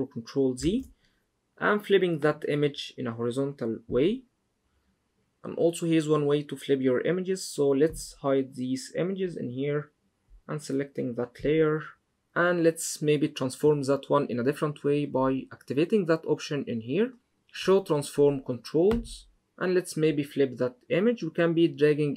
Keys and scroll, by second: 0.3 super+z.